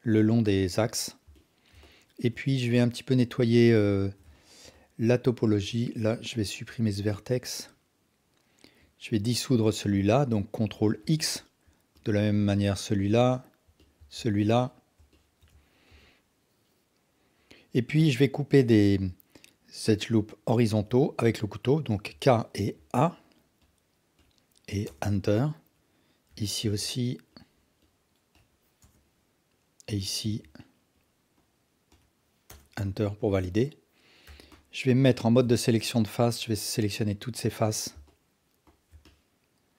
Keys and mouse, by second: 0.9 alt+drag, 1.3-1.6 ctrl+alt+drag, 1.8-2.3 alt+shift+drag, 2.5-3.1 alt+drag, 3.4 alt+click, 4.0 alt+shift+click, 4.3 ctrl+alt+drag, 4.7 alt+click, 6.7 x, 10.7 ctrl+x, 11.2-11.5 alt+drag, 13.3 alt+click, 14.7 alt+click, 15.2 alt+shift+click, 15.9 KP_1, 22.1 k, 26.3 k, 29.9 k, 34.3 3, 35.1 alt+click, 39.0-39.7 alt+drag.